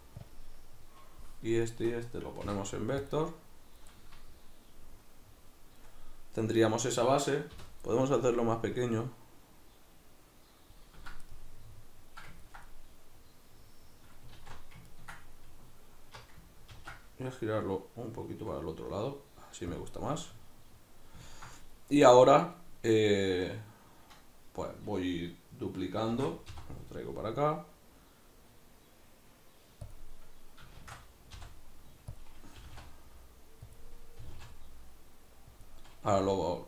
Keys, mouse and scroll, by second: 0.3 click, 1.7 shift+right click, 2.4 v, 3.9-6.5 middle drag, 6.5 right click, 7.5 l, 8.8-11.4 shift+drag, 11.4-30.0 middle drag, 14.4 alt+q, 16.8 ctrl+t, 19.8 click, 26.2 shift+d, 30.0 click, 30.8 shift+d, 32.2 click, 32.6 g, 33.7 click, 34.2 g, 35.6 click, 36.1 g.